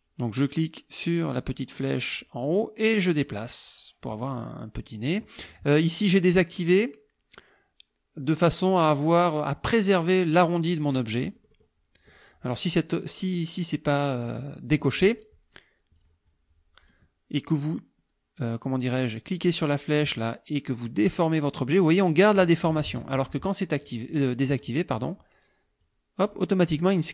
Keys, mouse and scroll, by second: 2.2-4.2 drag, 11.2 click, 16.0 click, 20.0-21.6 drag, 22.8 ctrl+z, 23.8-24.4 drag, 24.6 click, 25.0 click, 25.8-26.5 drag.